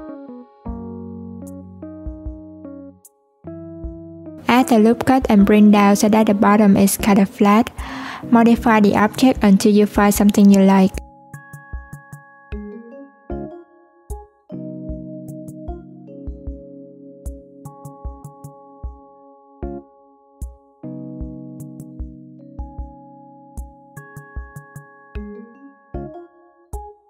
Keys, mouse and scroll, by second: 3.8 Tab, 5.0 ctrl+r, 11.0 Tab, 12.0 Tab, 12.7 ctrl+z, 12.9 Tab, 13.1 click, 14.3 click, 15.0 Tab, 15.4 alt+z, 15.9 click, 17.5 click, 19.3 s, 23.9 Tab, 24.3 Tab, 24.6 click, 25.6 click.